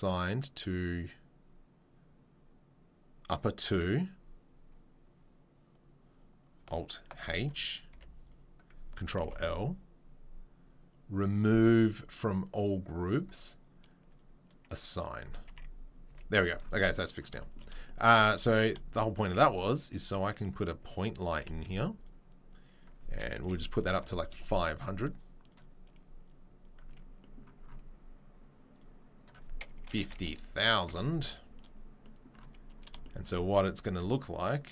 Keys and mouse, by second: 3.5-8.3 drag, 7.2 alt+h, 7.9 3, 8.3-11.2 middle drag, 9.2 ctrl+l, 11.2-14.1 drag, 14.1-14.6 middle drag, 14.6-17.3 drag, 16.0 Tab, 16.0 z, 17.3-22.0 shift+right drag, 18.9 click, 19.3 shift+a, 22.0 middle click, 22.0 g, 22.7 right click, 23.6-26.2 drag, 23.6 KP_0, 26.2-28.7 middle drag, 28.7 click, 30.1 right click, 30.1 KP_0, 33.2 click.